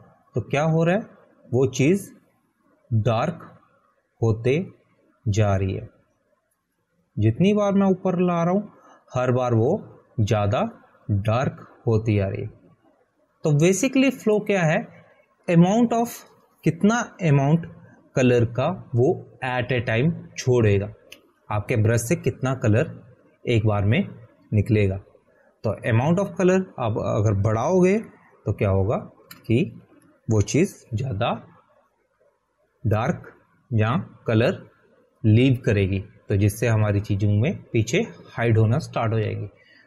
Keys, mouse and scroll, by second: 29.9 click, 30.2 ctrl+a, 31.6 Delete, 32.7 ctrl+d.